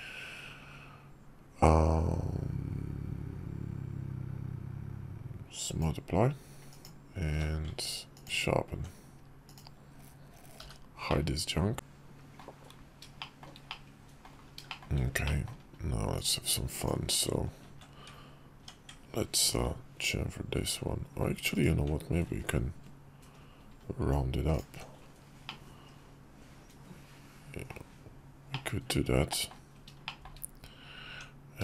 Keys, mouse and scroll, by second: 6.4 click, 7.0 q, 9.2 click, 10.3 h, 10.8-12.1 drag, 12.9 shift+middle drag, 13.4-14.0 middle drag, 14.4 shift+middle click, 14.9 middle click, 16.1 Tab, 16.5 click, 18.6 Tab, 19.2 ctrl+b, 22.2 ctrl+b, 24.4 Tab, 25.2-27.4 middle drag, 28.2-29.2 middle drag, 29.8 shift+middle drag, 30.8 Tab.